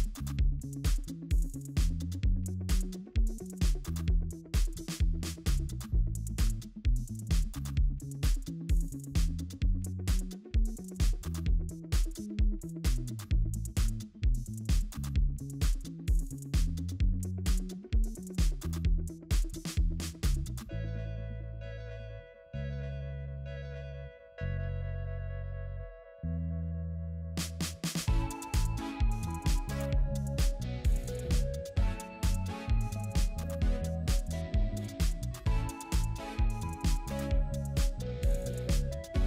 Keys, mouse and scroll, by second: 0.0 ctrl+j, 1.2 double click, 2.6-3.5 typing, 6.1 ctrl+j, 7.2 double click, 8.2-9.0 typing, 26.4 double click, 30.9 right click, 36.2 typing, 38.4-39.1 typing.